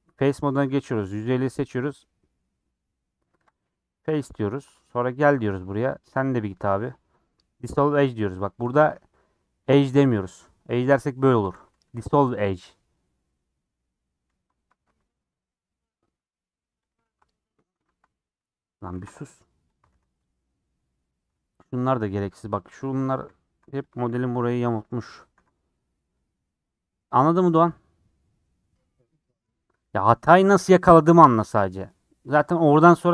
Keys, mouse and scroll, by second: 0.9 click, 3.5 x, 4.9 2, 5.3 alt+click, 7.8 x, 8.5 ctrl+z, 9.7 x, 11.4 ctrl+z, 13.1 x, 14.2 scroll down 2, 14.7 alt+z, 15.5-16.9 middle drag, 16.9 alt+click, 17.0 shift+f, 17.8 ctrl+z, 19.7 alt+click, 19.9 ctrl+x, 20.2 middle click, 20.7 scroll down 2, 20.9-21.9 middle drag, 21.9 scroll up 2, 24.0 ctrl+x, 25.3 ctrl+x, 25.9 scroll down 1, 26.1-29.1 middle drag, 30.2 scroll up 3, 31.9 scroll down 4, 32.2 middle click, 32.9 scroll up 3.